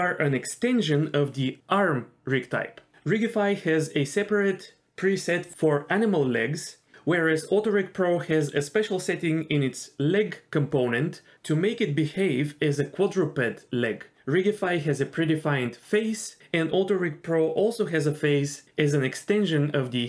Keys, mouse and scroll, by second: 5.9 middle drag, 6.3-7.9 scroll up 4, 18.1 click, 19.5 click.